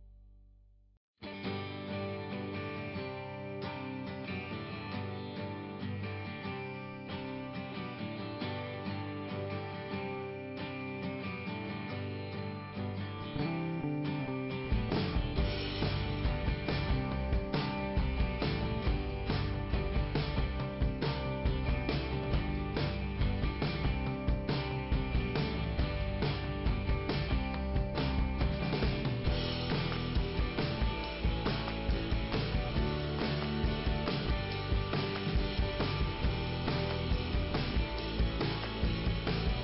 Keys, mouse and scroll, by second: 3.5 click, 8.2 click, 9.7 click, 12.1 click, 14.3 click, 20.0 click, 20.1 click, 22.3 click, 23.7 click, 26.4 click, 27.5 click, 30.6 click, 32.2 scroll down 1, 33.3 scroll down 1, 35.1 scroll down 2, 36.4 l, 37.2 scroll down 1.